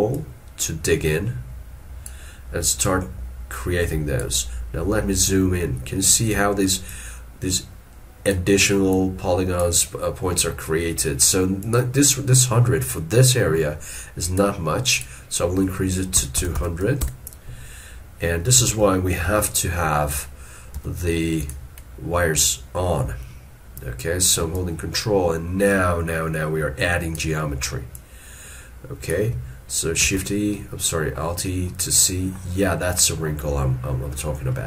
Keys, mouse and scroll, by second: 0.2 ctrl+click, 2.9 ctrl+click, 4.7 scroll up 1, 6.9 ctrl+click, 9.0 ctrl+click, 16.2 2, 18.7 alt+e, 19.3 alt+e, 24.6 ctrl+click, 28.0 ctrl+click, 30.1 alt+e, 30.4 scroll down 1, 30.9 middle click, 31.7 scroll down 1, 32.4 scroll down 1, 33.9 scroll up 1.